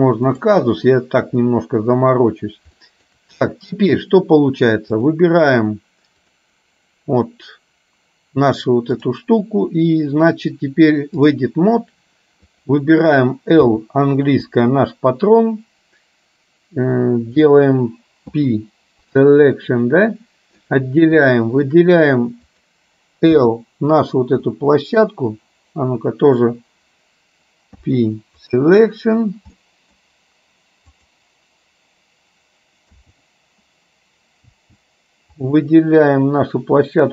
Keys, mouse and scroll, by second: 2.9 shift+middle click, 5.1 click, 9.2-12.1 drag, 12.7 click, 14.7 l, 18.4 p, 19.8-20.8 middle drag, 21.4 shift+middle click, 22.6 click, 24.6 middle click, 27.8 p, 29.7 middle click, 31.1 click, 34.7 l, 35.7-37.1 middle drag.